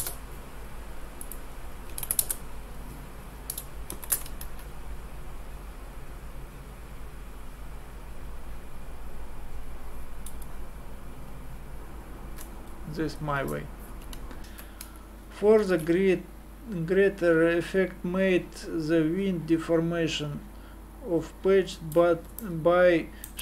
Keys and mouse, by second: 3.9 ctrl+shift+d, 4.4 alt+a, 14.4 super+Pause, 15.6 alt+a, 22.4-23.4 middle drag.